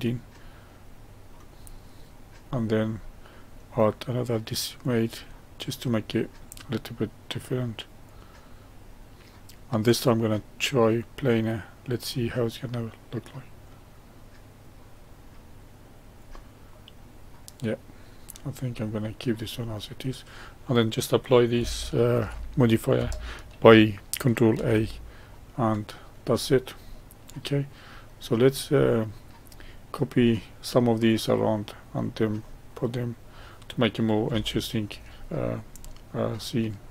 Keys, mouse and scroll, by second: 0.6-1.7 middle drag, 1.7-2.4 scroll up 1, 2.4-2.9 scroll down 1, 2.9-4.7 middle drag, 4.7-7.8 drag, 10.0-15.0 drag, 16.6-22.1 middle drag, 22.1 ctrl+a, 24.5 ctrl+a, 25.2-26.3 middle drag, 26.3-26.8 scroll down 1, 26.8-28.2 middle drag, 28.2-28.7 scroll down 1, 28.7-29.6 middle drag, 29.6-30.1 scroll down 1, 30.1-35.2 middle drag, 35.2-35.7 scroll down 1, 35.7-36.9 middle drag.